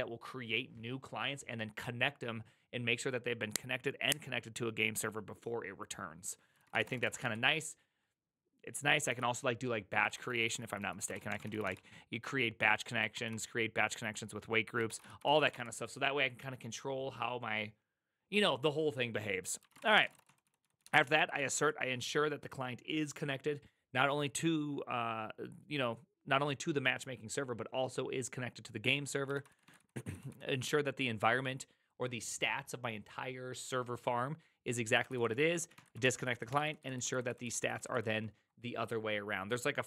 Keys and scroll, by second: 6.4-7.7 typing, 9.0 ctrl+c, 10.0-12.1 typing, 13.1 ctrl+n, 14.6-16.0 typing, 19.5-22.0 typing, 29.2-30.5 typing, 34.9-37.6 typing.